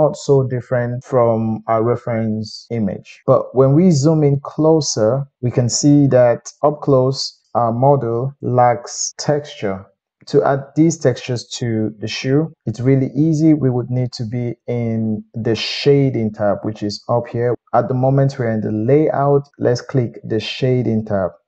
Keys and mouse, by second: 8.0-21.4 middle drag.